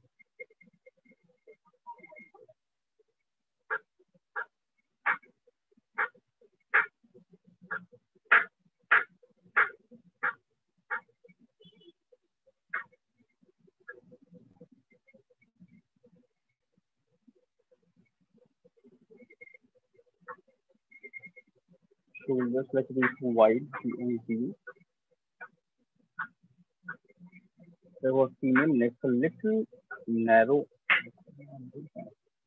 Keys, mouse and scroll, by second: 2.4-2.9 alt+click, 2.6 alt+click, 2.9 click, 3.0 click, 6.4 click, 6.8 click, 9.6 click, 10.4 click, 10.8 click, 11.8 click, 12.0 click, 12.2 click, 13.1 click, 13.7 click, 14.0 click, 15.3 click, 18.1-18.9 shift+click, 18.8 click, 19.2 alt+click, 20.2 right click, 21.3 click, 21.9 shift+click, 23.0-24.2 typing, 24.8 click, 26.6 click, 27.2 click, 27.8 click, 28.1 click, 29.6 click, 30.3 ctrl+z, 30.6 ctrl+z, 31.0 ctrl+z.